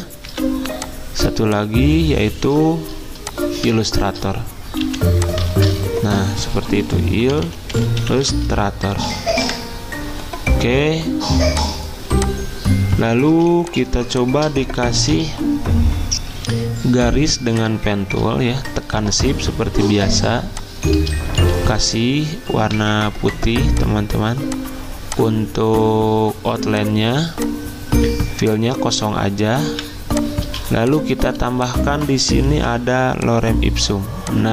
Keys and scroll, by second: 0.3 typing, 4.6-5.3 typing, 5.6 ctrl+a, 6.6-9.3 typing, 13.3 typing, 15.1 z, 16.2 p, 21.4 d, 22.7 d, 29.7 v, 30.5 z, 32.6 v.